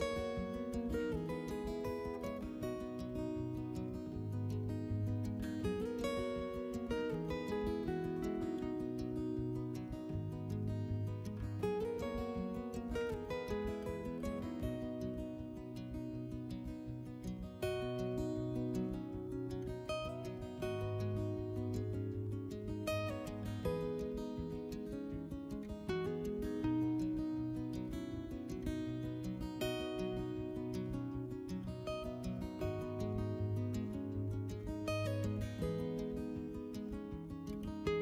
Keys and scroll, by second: 8.7 s, 10.2 s, 12.2 s, 18.3 3, 19.5-22.0 typing, 24.7 s, 25.9 s, 31.3 s, 32.2 2, 36.6 s.